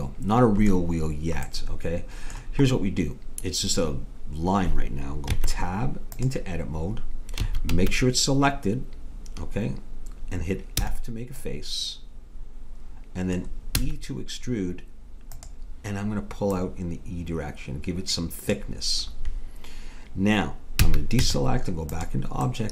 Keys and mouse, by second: 1.5-5.3 middle drag, 5.3 Tab, 7.4 a, 7.8 a, 10.8 f, 11.5-13.1 middle drag, 13.8 e, 16.5-18.4 drag, 20.8 a, 21.2 Tab.